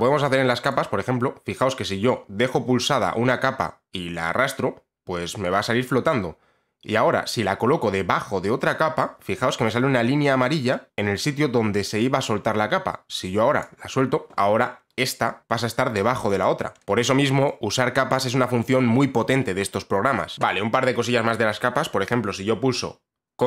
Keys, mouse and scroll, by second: 13.7 click, 16.5 click, 16.8 click, 20.3 click.